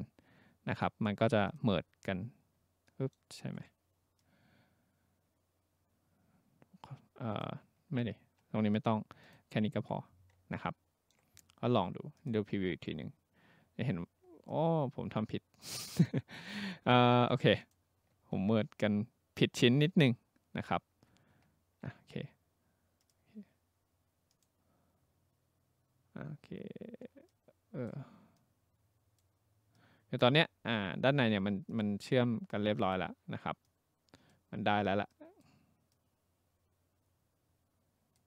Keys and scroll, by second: 7.9 ctrl+z, 16.8 ctrl+z, 18.2 ctrl+z, 18.7 ctrl+z.